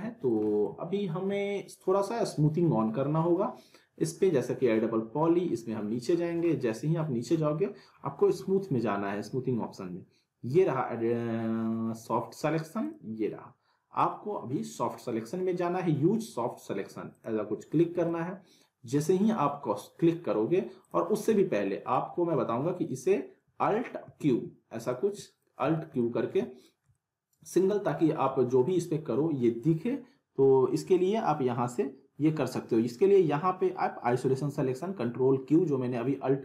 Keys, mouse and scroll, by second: 4.8-5.1 scroll down 1, 7.9-9.5 scroll up 2, 12.8-15.2 drag, 18.0-19.3 alt+middle drag, 20.8 click, 21.3-21.9 alt+middle drag, 24.0 alt+q, 24.9-25.5 alt+middle click, 25.6 z, 26.0-26.9 alt+middle drag, 27.9 z, 28.3 alt+middle click.